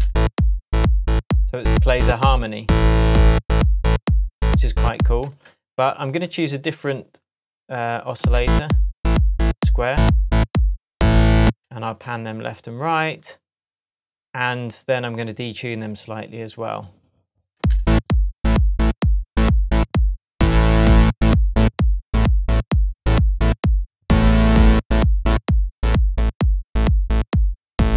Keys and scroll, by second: 5.2 space, 11.4 space, 17.5 space.